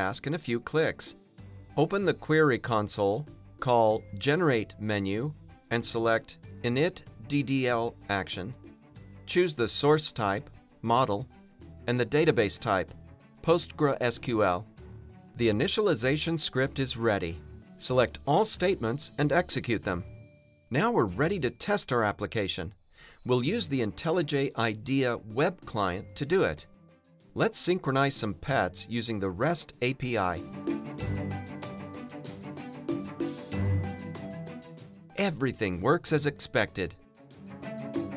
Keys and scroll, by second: 0.0 shift+super+F10, 1.0 super+n, 16.8 super+Return, 19.0 ctrl+r, 27.8 Return, 33.0 super+b, 36.8 shift+super+BackSpace.